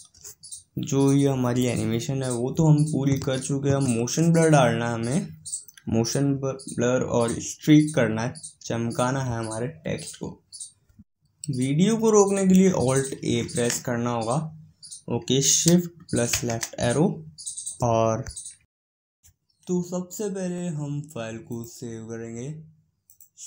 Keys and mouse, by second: 17.6 shift+Left, 21.4-23.4 drag.